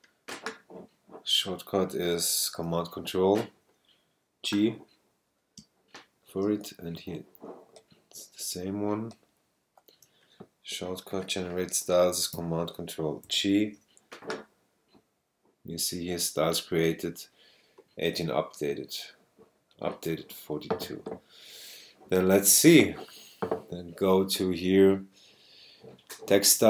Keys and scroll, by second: 5.6 space, 6.5 super+space, 13.2 ctrl+super+g.